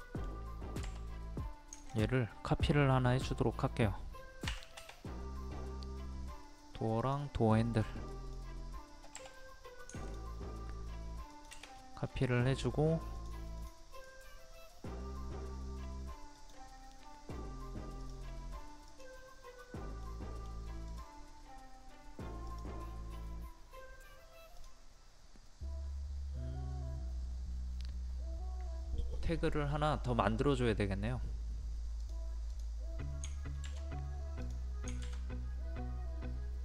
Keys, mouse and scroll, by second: 0.8 m, 1.7 ctrl+click, 4.4 Escape, 7.0 click, 7.6 middle click, 8.1 click, 9.1 m, 10.0 ctrl+click, 11.7 scroll up 1, 13.1 click, 13.9 right click, 16.3 click, 20.0 middle click, 20.9 click, 34.4 click.